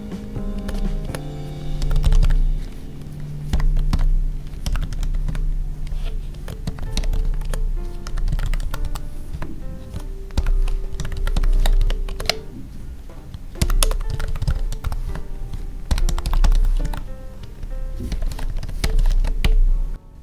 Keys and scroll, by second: 0.5 space, 0.6 Left, 0.9 space, 5.2 Tab, 6.3 space, 7.3 space, 9.3 Tab, 11.5 ctrl+s, 11.7 Right, 12.0 space, 12.1 Left, 13.7 space, 15.0 Tab, 16.8 ctrl+s, 17.3 Right, 18.3 ctrl+s, 18.4 Right, 18.9 ctrl+s, 19.1 Right, 19.9 Down.